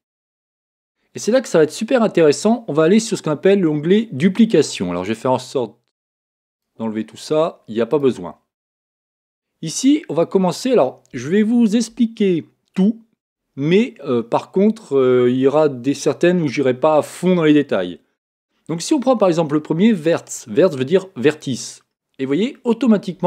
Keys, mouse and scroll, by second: 0.2 click, 5.0-9.5 drag, 21.3 click, 22.5-23.2 middle drag.